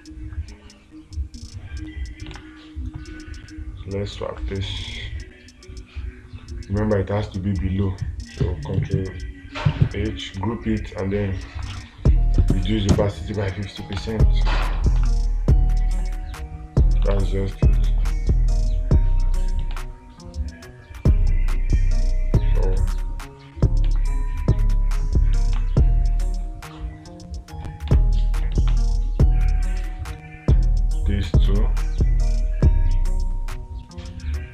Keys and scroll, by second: 2.8 space, 14.4 space, 15.4 space, 17.6 space, 20.2 space, 24.3 space, 26.0 space, 28.4 space, 29.2 space.